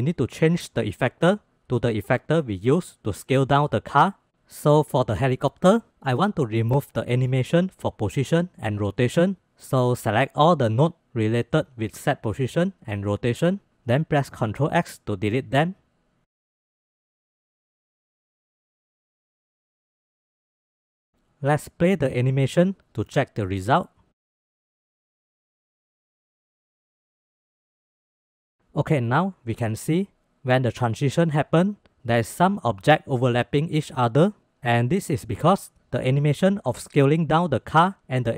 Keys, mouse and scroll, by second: 5.0-5.4 middle drag, 6.0-6.6 middle drag, 7.5 middle click, 8.2-12.5 drag, 13.8 ctrl+x, 15.4 drag, 15.9 drag, 16.6 click, 17.4 click, 17.9 ctrl+x, 18.4-18.9 drag, 19.4-19.9 drag, 20.5 middle click, 21.5 space, 22.8 space, 24.4 space, 25.8-26.2 middle drag, 25.8 space, 26.7-27.8 drag, 27.8-28.1 middle drag, 35.9 click.